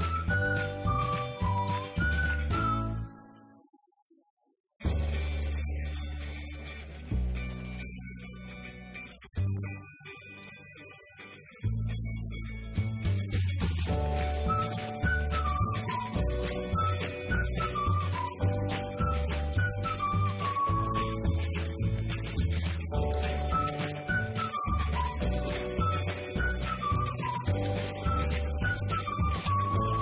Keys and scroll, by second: 9.9 Return.